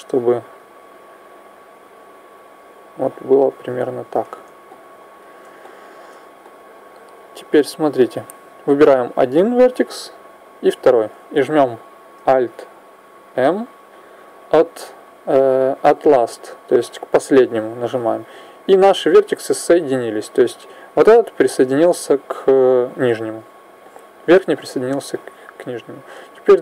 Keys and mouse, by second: 0.2 click, 4.5-8.0 middle drag, 8.0 right click, 12.9 alt+m, 21.4-26.1 middle drag, 26.1 a.